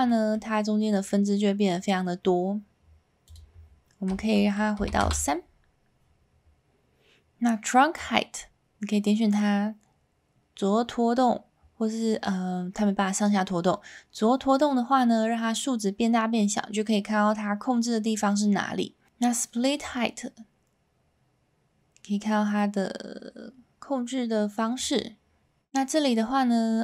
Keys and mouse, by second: 0.0 middle click, 1.1-1.8 middle drag, 3.3-6.2 drag, 8.0-18.2 drag, 19.9-24.7 drag.